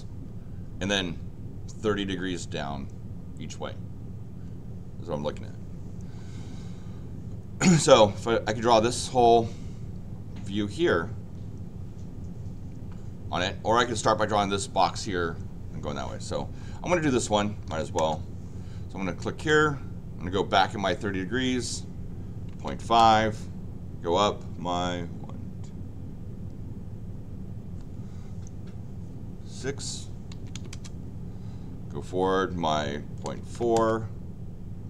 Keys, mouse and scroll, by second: 17.6 l, 17.9 Return, 19.3 click.